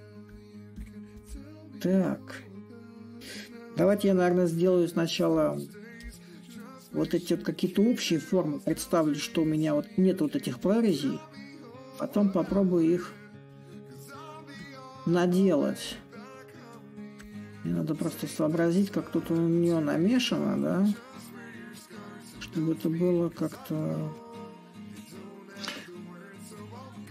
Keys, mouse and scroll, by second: 0.0-3.7 drag, 3.7 a, 5.8-10.8 drag, 11.0-16.0 drag, 16.5-21.5 drag, 22.1-27.1 drag.